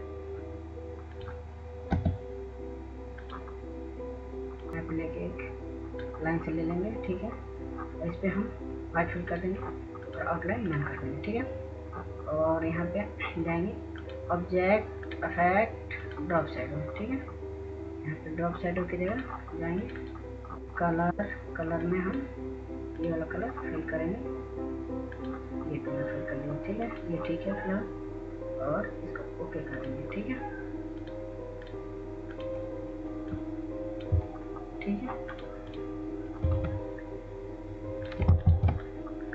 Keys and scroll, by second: 2.0-2.9 typing.